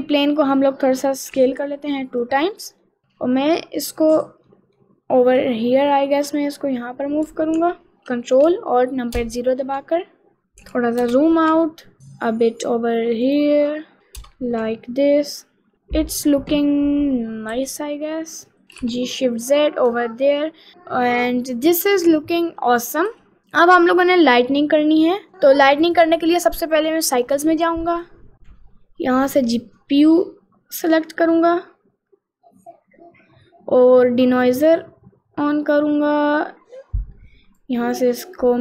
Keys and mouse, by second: 0.4 click, 1.4 s, 2.6 click, 2.9 middle click, 3.9 click, 4.5 middle click, 5.4 click, 5.8-7.0 middle drag, 12.0 g, 13.7 middle click, 17.7 g, 23.4 ctrl+s, 24.0 click, 25.9 click, 26.7 click, 27.2-28.3 drag, 29.9-32.4 drag, 34.5 click, 37.6-38.6 drag.